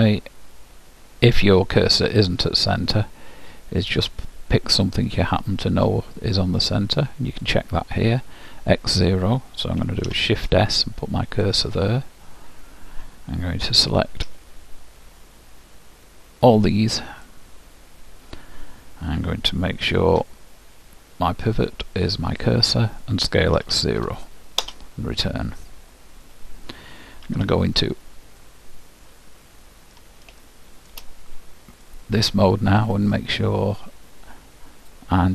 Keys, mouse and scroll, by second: 2.6-5.1 middle drag, 5.1-8.5 drag, 10.1 shift+s, 12.2 middle click, 14.3 b, 21.5-23.3 drag, 23.7 s, 27.3 z, 28.4 middle click, 28.6-30.1 middle drag, 30.5-33.6 middle drag.